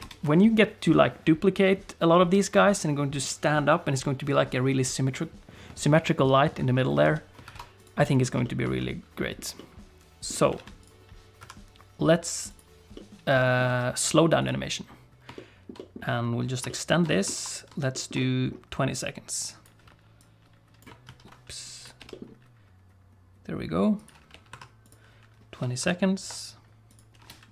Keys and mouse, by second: 0.0 ctrl+space, 7.0 alt+a, 7.5 ctrl+s, 7.8 click, 8.4 shift+middle click, 8.8 middle click, 9.5 middle click, 10.6 alt+a, 10.8 click, 11.4 KP_1, 12.6 click, 12.9 middle click, 13.7 alt+a, 14.4 click, 15.4 ctrl+middle click, 15.8 middle click, 16.7 ctrl+click, 17.1 middle click, 17.3 ctrl+t, 18.0 click, 18.2 click, 19.0 click, 20.2 click, 21.1 ctrl+z, 21.6 click, 24.3 g, 25.8 ctrl+End, 26.9 click, 27.2 space.